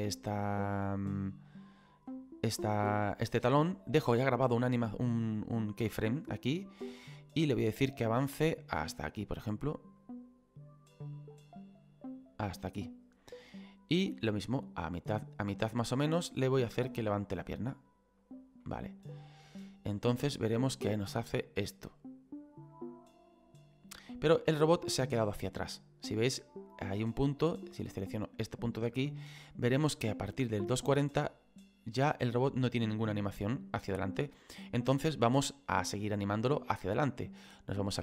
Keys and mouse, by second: 1.0 click, 6.4 click, 10.0 click, 13.9 click, 16.5 click, 18.6 middle click, 19.6 click, 28.4 right click, 29.3 click.